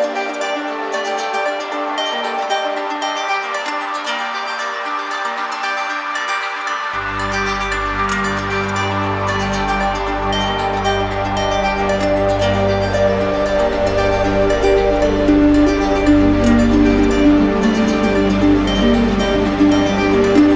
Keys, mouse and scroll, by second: 2.4 click, 3.0 w, 6.1 click, 9.6 click, 10.6 click, 12.4 click, 13.4 click, 15.1 click, 18.1 click, 19.1 click.